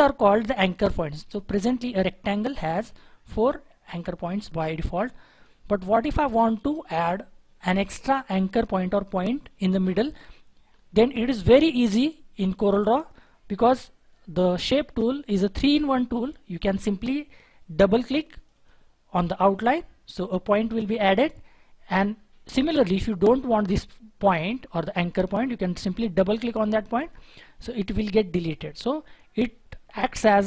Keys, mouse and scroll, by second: 18.6 double click, 27.1 double click.